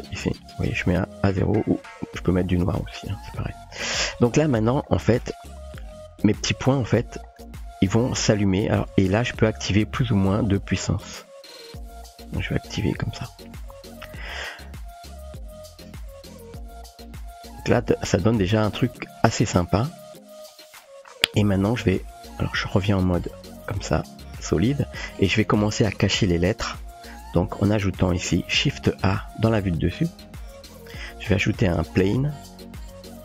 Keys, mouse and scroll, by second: 1.6 click, 4.6-5.1 shift+middle drag, 6.4 shift+middle click, 10.7-14.1 drag, 15.3 middle click, 17.3 click, 18.4 shift+middle drag, 24.1 click, 30.3 shift+a, 32.2 typing.